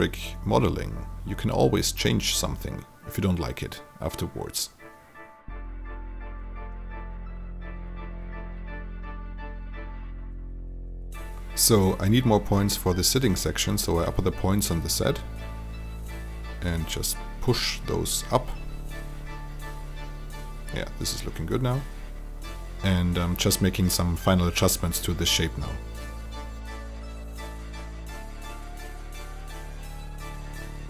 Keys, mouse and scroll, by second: 4.2-5.7 alt+drag, 6.3 click, 6.9 alt+click, 7.7 shift+click, 8.8 shift+e, 9.5 click, 14.6 alt+click, 15.8 click, 16.1 alt+click, 17.6 shift+click, 18.7-24.1 drag, 24.2 alt+click, 26.1 click, 26.4 alt+click, 26.7 click, 27.6 alt+click, 27.8 alt+right click, 28.1 alt+click, 28.4 click, 28.6 shift+click, 29.1 shift+t, 29.3 click, 30.0 alt+right click, 30.2-30.8 alt+drag.